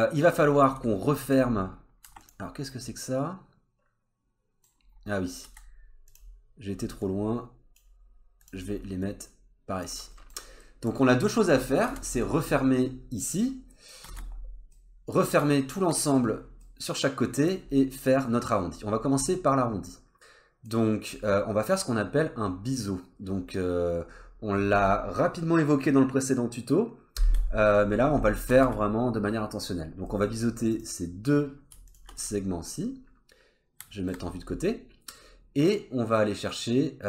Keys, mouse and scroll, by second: 0.1 middle click, 0.4 scroll up 2, 0.6 Tab, 1.3 scroll up 1, 2.0 3, 2.2 click, 2.7 middle click, 4.8-5.3 scroll down 2, 5.5 2, 5.7 scroll up 1, 6.1 click, 6.7 scroll down 1, 7.0 click, 8.4 click, 9.0 click, 10.1 middle click, 10.6 middle click, 11.0 scroll down 2, 11.5-11.8 scroll up 2, 11.9 alt+z, 12.2 middle click, 13.7 middle click, 14.1 alt+z, 14.2-14.7 scroll down 2, 14.7 middle click, 16.4 scroll down 1, 16.6 middle click, 17.6 scroll up 2, 18.7-19.1 scroll up 2, 19.1-19.5 scroll down 3, 19.5 middle click, 21.0-22.1 scroll up 2, 28.5 alt+z, 29.0-30.1 scroll up 1, 30.1 middle click, 30.7 click, 31.9 shift+click, 32.2 middle click, 34.4-34.9 scroll up 2.